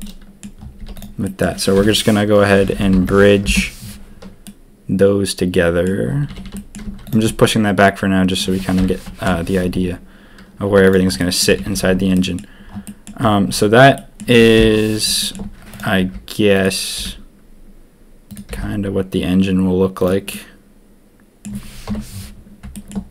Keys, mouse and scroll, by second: 0.0 click, 0.7 z, 1.2 click, 1.7 F3, 4.4-5.8 drag, 6.2 a, 6.4 a, 6.5 click, 6.8 z, 7.2-8.4 drag, 9.2 ctrl+KP_3, 10.6 z, 11.2 click, 11.2 right click, 11.5 Tab, 11.6 a, 11.8 a, 12.1 drag, 12.8 drag, 13.9 drag, 14.5 ctrl+KP_1, 15.2 shift+drag, 15.7 click, 15.9 g, 16.9 g, 18.4 g, 20.3-21.4 drag, 21.8 KP_7.